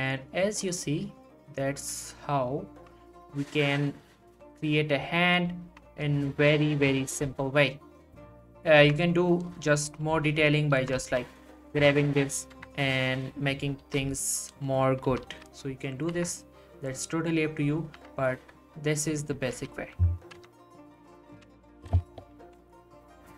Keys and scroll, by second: 7.1 h, 8.8 Tab, 10.7 g, 11.0 y, 11.8 Tab, 12.5 Tab, 13.8 g, 15.3 y, 16.1 Tab, 19.6 g, 19.7 y, 20.3 Tab, 22.4 1.